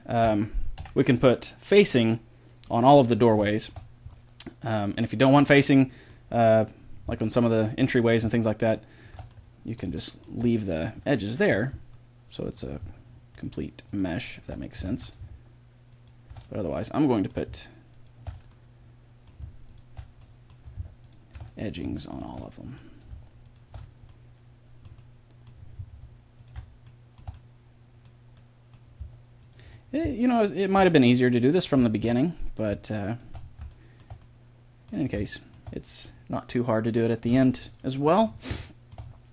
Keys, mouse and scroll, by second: 0.7 Delete, 4.2 middle click, 5.7 middle click, 8.6 middle click, 9.3 click, 9.5-11.1 middle drag, 11.3-12.5 middle drag, 14.9 ctrl+z, 16.8 middle click, 22.1-24.7 middle drag, 24.7 click, 24.8 right click, 24.9 middle click, 25.0 click, 25.1-26.8 middle drag, 26.8 click, 26.9 middle click, 27.0 click, 28.1-29.4 middle drag, 32.1 middle click, 33.1-39.3 middle drag.